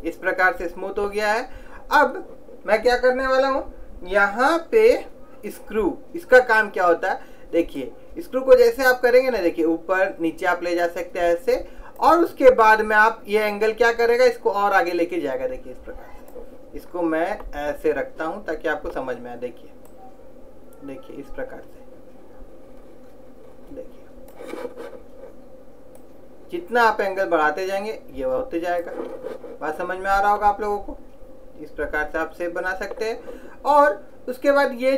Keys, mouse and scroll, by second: 7.9 click, 13.6 click, 17.0-20.0 middle drag, 20.0 click, 26.1 click, 30.5-32.3 middle drag.